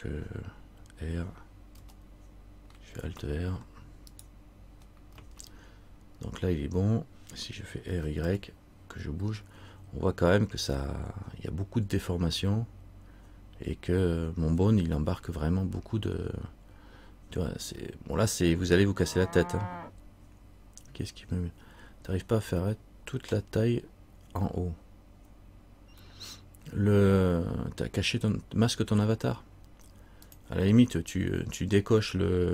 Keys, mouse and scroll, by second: 1.9 r.